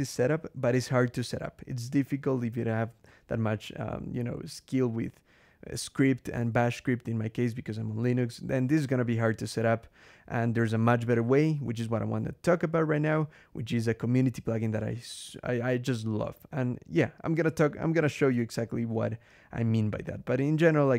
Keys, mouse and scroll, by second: 4.0 scroll down 2, 4.6-4.9 scroll down 2, 9.4-9.8 scroll down 2, 16.3 scroll down 2, 19.0-19.4 scroll down 2.